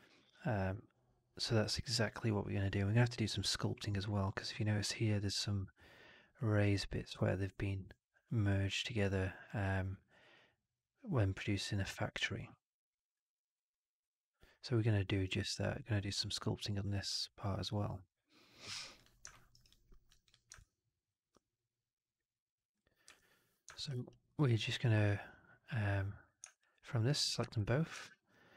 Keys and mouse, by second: 19.2 alt+middle drag, 19.4 alt+right drag, 19.6-20.0 alt+drag, 20.2 click, 20.5-22.6 alt+drag, 23.7 alt+right drag, 23.9 alt+right drag, 24.2-24.8 middle drag, 26.4 shift+click, 27.8 shift+Tab.